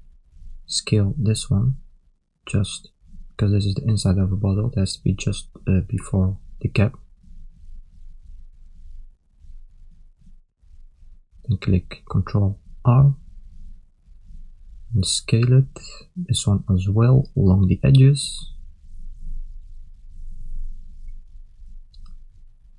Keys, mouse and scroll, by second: 0.9 s, 8.6 a, 10.7 ctrl+r, 15.5 s.